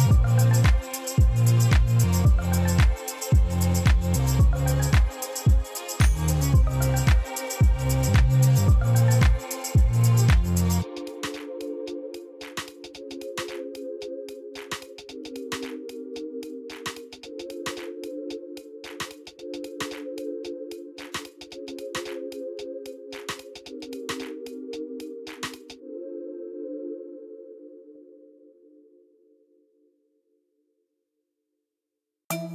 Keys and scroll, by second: 18.9 3, 19.5 Return, 21.8 3, 22.3 Return, 27.1 Tab, 29.3 a, 30.7 s, 31.4 y.